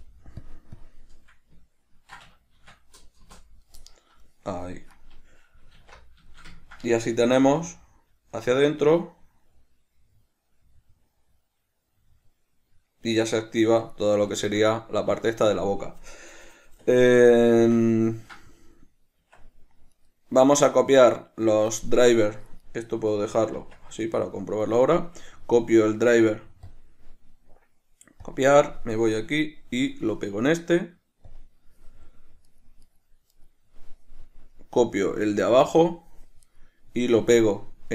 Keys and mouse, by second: 3.6 Return, 5.2 right click, 6.0 alt+q, 6.6-14.3 ctrl+shift+middle drag, 7.7 g, 14.3 right click, 14.6-20.2 shift+middle drag, 19.5 Tab, 20.2 right click, 22.9 right click, 23.4 right click, 23.8 Tab, 24.4 right click, 27.0 click, 27.6-29.3 right drag, 30.5-32.8 right drag, 33.2 right click, 33.6 right click, 34.8-36.8 right drag.